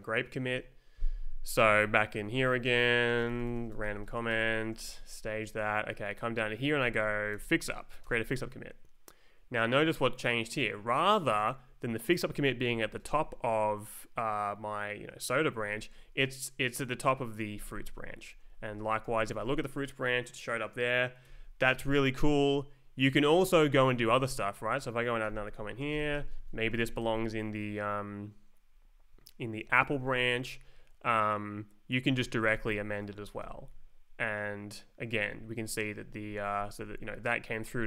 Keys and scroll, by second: 1.5 ctrl+s, 2.3 super+Right, 2.5-5.1 typing, 4.7 Left, 5.5 Right, 7.3 shift+f, 8.0 Return, 11.3 Up, 15.7 Down, 18.4 Left, 18.7 Down, 19.0 Return, 21.2 Escape, 21.7 Right, 22.1 Down, 23.3 ctrl+s, 24.0 Down, 25.3-26.8 typing, 27.0 ctrl+t, 28.7 Down, 29.7 Left, 29.9 space, 30.2 Right, 32.5 shift+a, 33.4 Return, 35.3 Up, 36.7 Down.